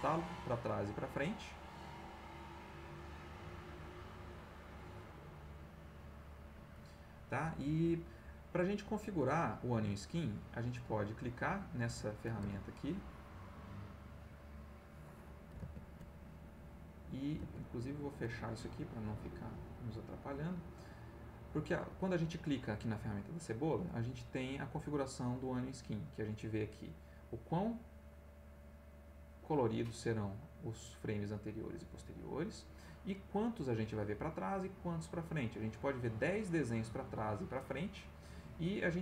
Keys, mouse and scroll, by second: 3.3 click, 7.8 click, 11.2 click, 13.0 alt+Tab, 16.0 alt+Tab, 17.7 alt+Tab, 18.9 Escape, 20.1 click, 21.3 click, 23.9-24.7 drag, 26.6-32.7 drag.